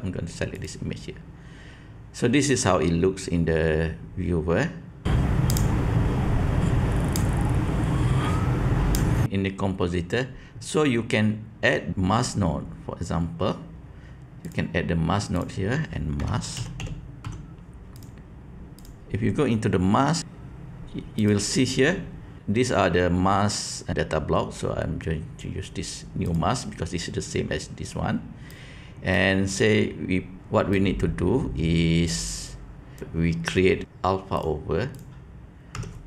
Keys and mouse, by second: 7.2-8.9 drag, 14.4-18.8 drag, 21.1-26.3 drag, 28.4-29.1 drag, 30.6-32.9 drag, 34.4-36.0 drag.